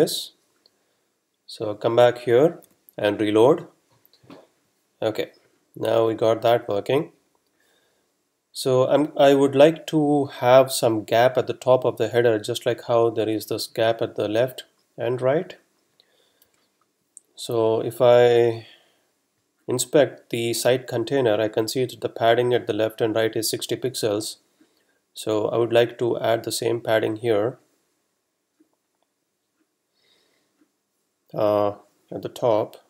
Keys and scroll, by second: 2.6 r, 16.5 F12.